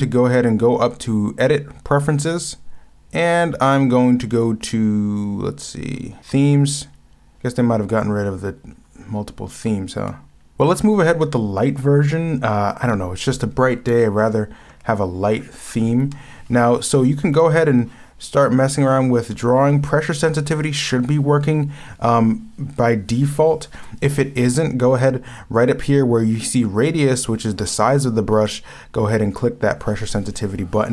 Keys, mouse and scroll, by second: 14.2 scroll up 1, 14.6 scroll down 1, 16.0 ctrl+z, 17.5 ctrl+z, 24.5 ctrl+z, 28.4 ctrl+z.